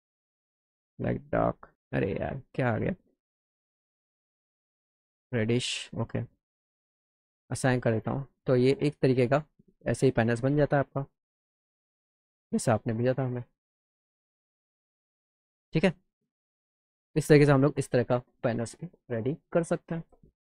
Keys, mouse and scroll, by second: 0.3 click, 1.5 click, 2.8 click, 3.7 click, 5.1 click, 7.0 click, 7.9 click, 8.5 scroll up 2, 9.9 alt+middle click, 11.0-12.2 alt+middle drag, 13.5-14.6 alt+middle drag, 15.3 scroll up 2.